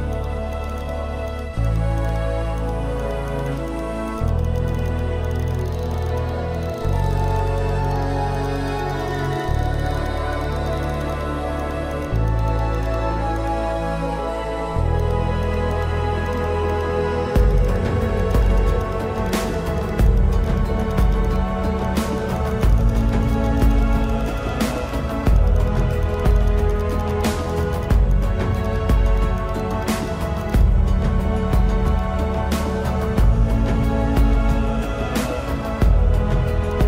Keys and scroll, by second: 0.0 ctrl+=, 0.7 space, 4.1 ctrl+alt+z, 13.2 space, 14.4 space, 15.3 ctrl+alt+z, 15.6 ctrl+alt+z, 18.5 ctrl+alt+z, 20.1 space, 21.4 ctrl+alt+z, 21.7 space, 25.2 space, 26.3 space, 28.0 space, 29.0 space, 29.8 space, 31.1 space, 34.0 space.